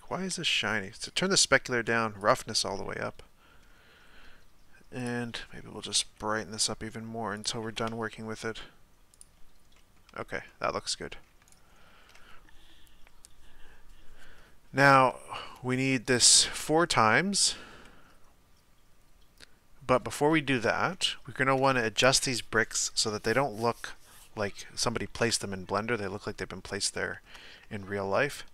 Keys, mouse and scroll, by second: 0.8-2.8 drag, 2.8-5.0 middle drag, 5.0 click, 6.0 g, 7.9 Tab, 9.1 click, 9.7-11.5 middle drag, 11.5-16.2 right drag, 16.2 click, 16.8-25.2 middle drag, 25.2 KP_1, 26.3-26.8 scroll up 2, 26.9-28.5 shift+middle drag.